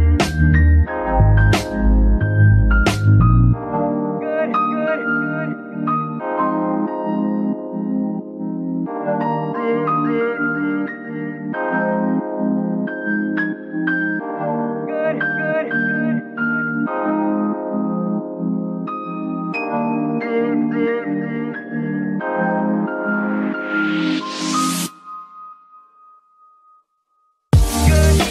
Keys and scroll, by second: 4.0 z, 6.5 z, 10.8 f, 11.3 g, 11.5 x, 13.0 z, 14.4 KP_3, 16.4 g, 18.1 shift+z, 18.8 z, 19.9 g, 25.1 z.